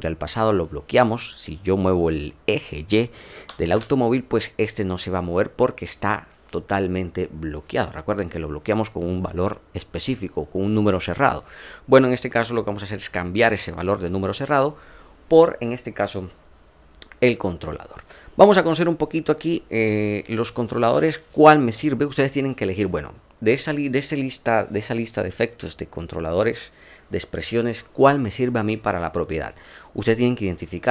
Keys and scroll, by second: 3.6 ctrl+z.